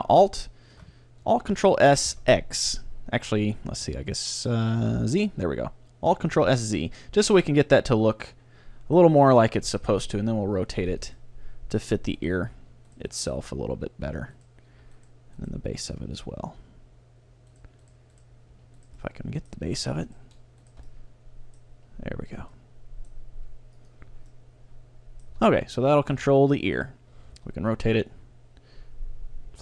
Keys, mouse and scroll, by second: 1.8 ctrl+alt+s, 7.7-9.5 middle drag, 9.9 ctrl+r, 11.1-12.9 drag, 11.3-13.2 middle drag, 12.3-17.2 right drag, 12.7 g, 13.4 g, 14.4-16.2 drag, 14.8 g, 15.8 g, 17.9-20.3 right drag, 18.5 g, 19.1-20.3 middle drag, 21.8 g, 23.4 g, 24.0-25.7 drag, 24.0-26.3 middle drag, 25.4 Tab, 26.3 a, 26.5 middle click, 26.9-28.6 right drag, 27.3 r.